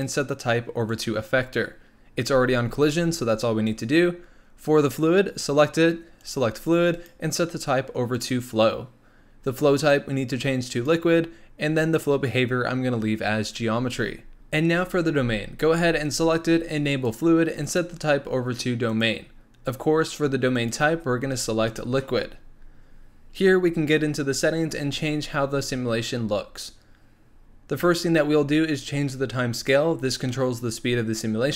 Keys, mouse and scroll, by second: 6.2 click, 6.9-14.3 drag, 16.9-23.3 drag, 23.3-25.2 scroll down 5, 26.0-29.1 scroll up 3, 29.5-31.5 drag.